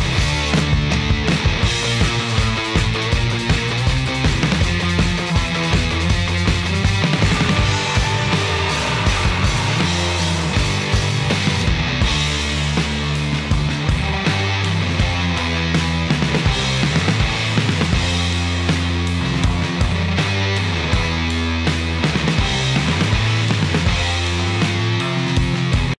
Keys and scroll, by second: 17.3 space, 22.6 shift+3, 23.1 Return.